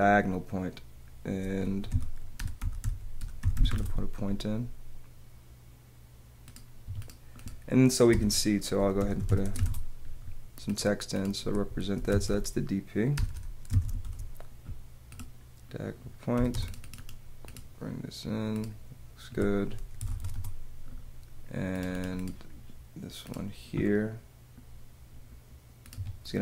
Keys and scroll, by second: 1.6 p, 6.9 Escape, 8.1 BackSpace, 10.4 Return, 11.9-12.7 typing, 16.3 m, 17.1 space, 20.0 c, 25.9 Escape.